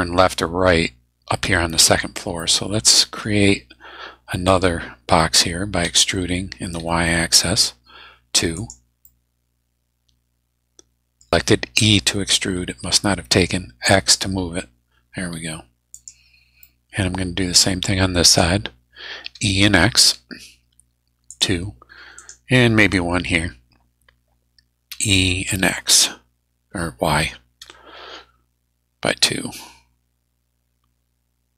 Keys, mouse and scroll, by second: 2.4-3.4 middle drag, 5.8 e, 6.8 y, 8.5 click, 9.0-11.3 middle drag, 11.8 e, 13.9 x, 15.9 click, 16.6-17.6 middle drag, 18.2 right click, 19.2 e, 20.0 x, 21.3 click, 22.2 right click, 24.9 e, 25.5 x, 27.6 y.